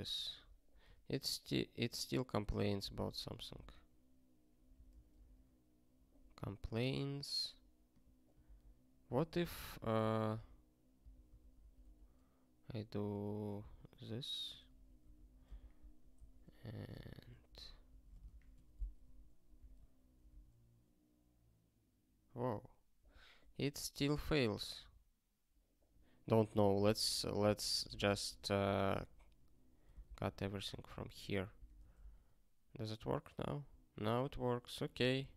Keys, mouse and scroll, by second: 0.8 q, 4.7 super+o, 5.4 ctrl+k, 6.6 q, 19.6 super+o, 20.4 ctrl+k, 23.6 q, 31.6 super+o.